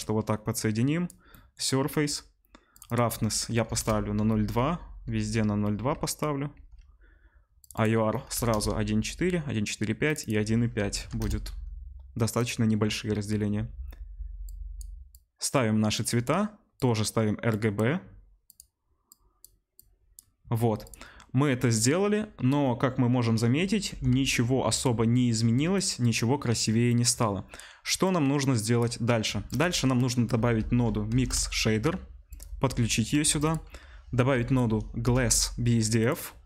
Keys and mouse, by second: 4.8 ctrl+c, 5.8 ctrl+v, 6.6 ctrl+v, 10.9 BackSpace, 12.4-28.0 middle drag, 15.9 click, 18.4 click, 23.9 r, 28.0-32.4 drag, 29.3 shift+a, 32.4-36.4 middle drag, 33.3 shift+a.